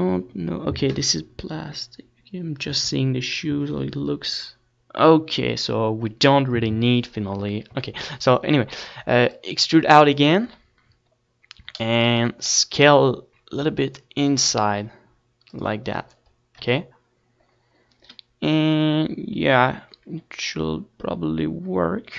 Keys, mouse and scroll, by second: 7.8 e, 8.2-10.1 right drag, 9.4-11.4 drag, 12.2-16.0 middle drag, 12.7 z, 13.8 s, 16.2-18.2 drag, 17.3 KP_1, 20.8-22.1 middle drag.